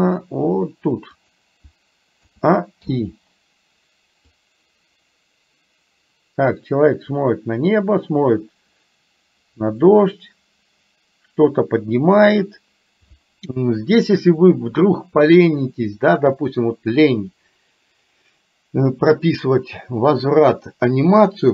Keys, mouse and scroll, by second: 2.3 a, 2.9 i, 4.4-12.5 drag.